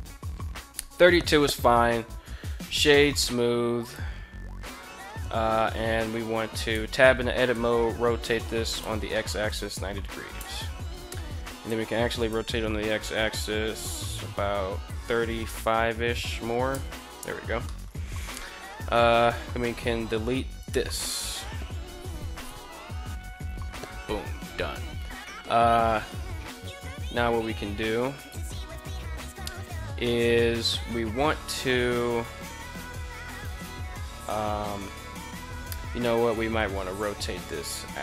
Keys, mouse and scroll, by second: 2.0 w, 6.1 Tab, 7.0 r, 8.3 x, 8.9 9, 9.2 0, 9.7 Return, 11.1 r, 11.8 x, 14.4 3, 14.9 5, 16.2 Return, 17.4 shift+middle drag, 18.2 right click, 19.1 x, 27.7 alt+right click, 29.5-30.1 middle drag, 35.8 ctrl+z, 36.1 ctrl+z, 36.2 ctrl+z, 36.4 ctrl+z.